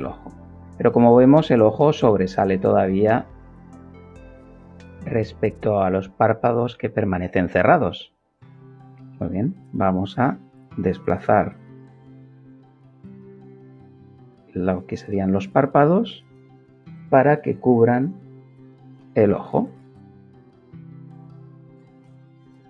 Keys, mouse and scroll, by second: 2.2-3.7 shift+middle drag, 3.9 shift+middle click, 8.1 g, 9.0 y, 18.8 click, 19.6 middle click, 21.6-22.6 middle drag.